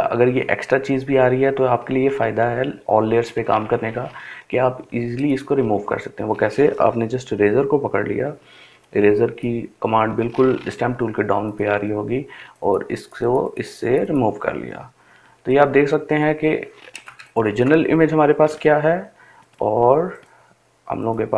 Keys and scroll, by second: 7.0-7.8 [.